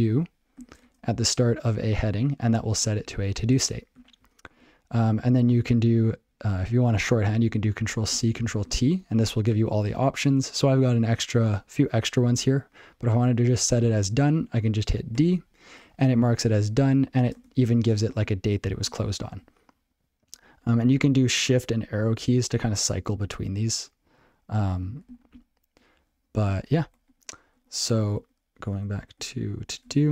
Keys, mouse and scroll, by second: 3.9 ctrl+g, 5.0 ctrl+p, 16.6 ctrl+p, 19.8 ctrl+p, 21.4 shift+Right, 21.7 ctrl+p, 23.2 shift+Right, 25.3 ctrl+k, 26.8 shift+Left, 26.9 shift+Left, 27.1 shift+Left, 27.5 shift+Left, 28.1 shift+Left, 28.8 shift+Left, 29.1 shift+Left, 29.5 shift+Right.